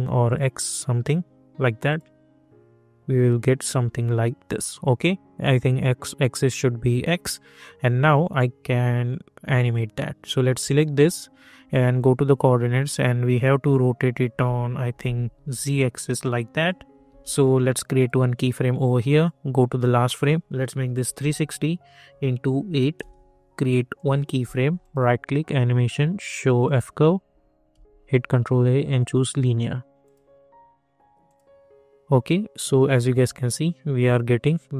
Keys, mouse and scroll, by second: 4.6 click, 7.3 click, 10.6-15.3 drag, 15.3 ctrl+z, 15.9-17.0 drag, 17.0 ctrl+z, 17.9 click, 22.9 Return, 23.9 click, 24.8 right click, 26.6 click, 27.7 ctrl+a, 28.2 click.